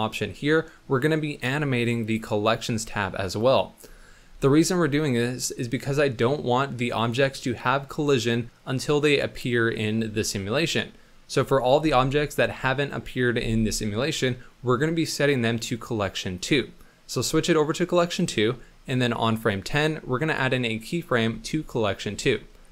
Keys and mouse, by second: 21.2 i.